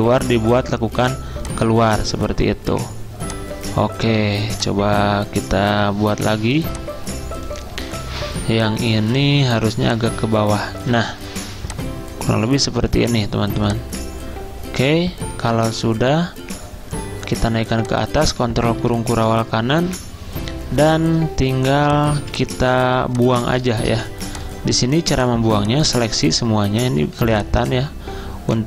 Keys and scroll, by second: 18.9 ctrl+shift+], 19.9 v, 21.6 v, 25.4-26.2 typing, 27.2 z.